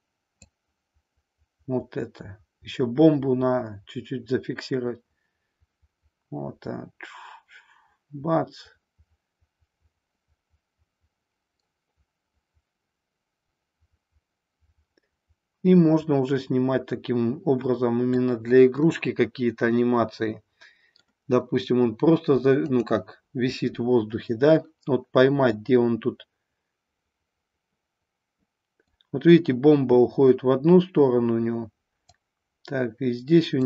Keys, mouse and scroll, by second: 0.5-18.1 drag, 18.7-21.0 middle drag, 22.6 click, 25.5-29.0 drag, 32.0 click.